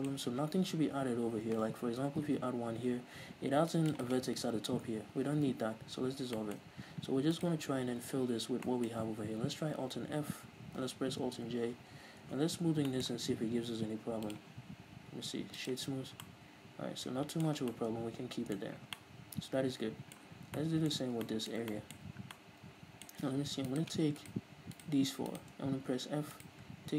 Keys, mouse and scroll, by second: 1.1-1.8 scroll down 2, 1.8 ctrl+r, 3.9 click, 4.0 right click, 5.6 ctrl+z, 6.3-7.3 shift+middle drag, 7.3 alt+right click, 8.3-8.6 scroll up 2, 8.6-14.2 shift+middle drag, 9.9 alt+f, 11.4 alt+j, 12.2 Tab, 12.5 scroll down 2, 14.2-16.2 drag, 15.9 scroll up 2, 16.2-23.7 middle drag, 17.6 scroll down 2, 18.6-18.9 scroll up 2, 20.4 scroll down 2, 21.0 Tab, 22.1 scroll up 2, 23.7-26.0 right drag, 26.0 f, 26.3-26.9 right drag.